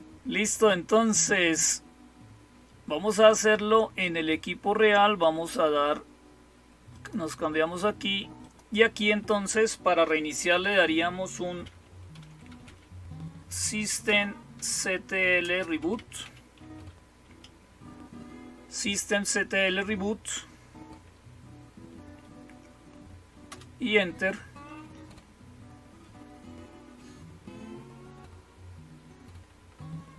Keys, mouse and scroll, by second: 6.8 click, 8.3 click.